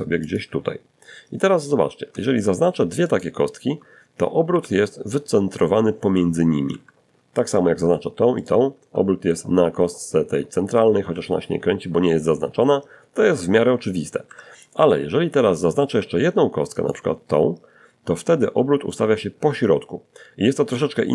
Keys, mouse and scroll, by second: 1.3 shift+right click, 2.7 shift+r, 4.9 Escape, 5.6 click, 6.6 shift+click, 9.2 r, 12.5 Escape, 15.0 shift+click.